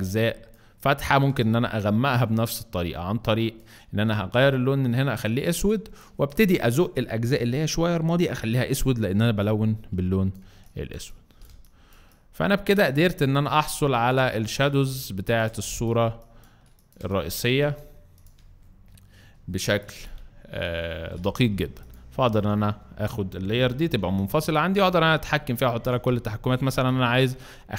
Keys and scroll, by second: 5.5 space, 11.4 space, 12.6 space, 14.2 space, 19.6 alt+space, 20.2 alt+space, 22.2 v, 23.3-24.2 typing, 25.7 ctrl+alt+z, 26.6 ctrl+alt+space.